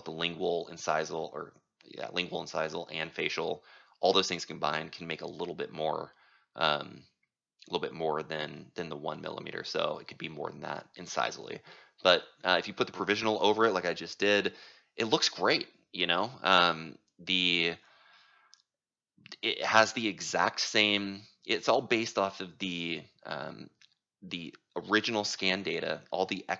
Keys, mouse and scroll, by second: 0.0-5.1 drag, 5.3-6.6 right drag, 6.6-9.5 drag, 9.5-13.1 right drag, 13.1-26.5 drag.